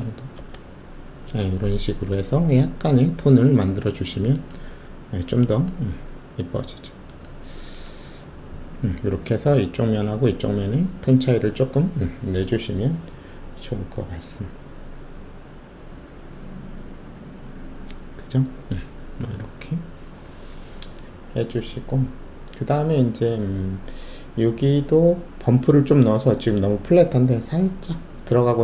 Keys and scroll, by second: 0.4 Return.